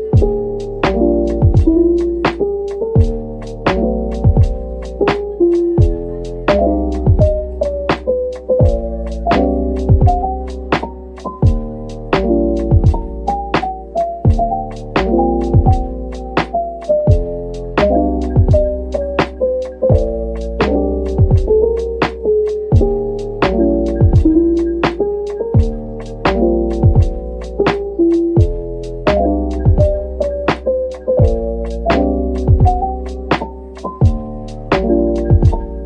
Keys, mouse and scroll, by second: 0.1 double click, 0.7 alt+click, 1.2-1.5 scroll up 1, 2.4 alt+shift+click, 3.5 scroll up 2, 4.1 alt+shift+click, 4.6-5.0 alt+shift+scroll down 2, 5.0 middle click, 6.3 alt+shift+click, 8.0 alt+shift+click, 9.6 alt+shift+click, 10.4 scroll up 1, 11.2 middle click, 12.3 alt+shift+click, 12.8 alt+shift+click, 15.4 alt+shift+click, 16.1-17.4 scroll down 1, 18.3 Tab, 18.6 scroll down 1, 19.4 /, 20.3 middle click, 21.4 shift+click, 23.6 ctrl+l, 25.6 Tab, 25.9 Tab, 26.7-27.0 scroll down 1, 27.0 middle click, 28.8 scroll up 1, 30.0 shift+click, 30.3 shift+scroll up 1, 30.3 shift+middle click, 31.2 shift+click, 31.8 scroll down 1, 32.3 middle click, 32.7-33.0 scroll down 1, 33.2 shift+click, 34.1 ctrl+l.